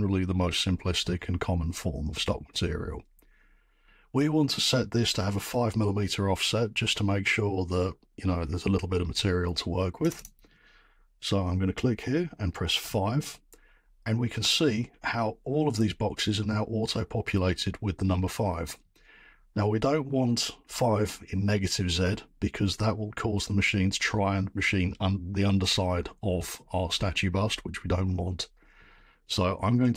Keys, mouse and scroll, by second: 10.1 click, 10.2 click, 12.8 5.